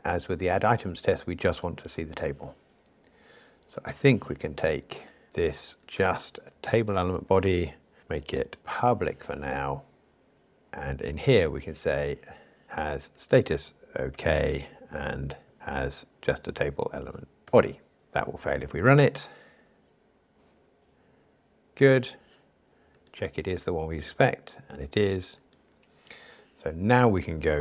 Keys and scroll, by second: 8.6 alt+shift+Left, 17.5 Return, 18.0 ctrl+r.